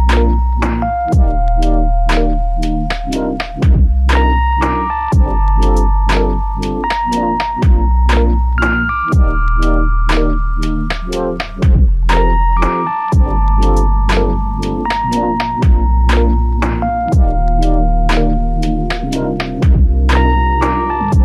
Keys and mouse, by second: 3.7 f, 5.8 double click, 17.0 shift+click, 17.9 shift+click, 19.1 shift+click.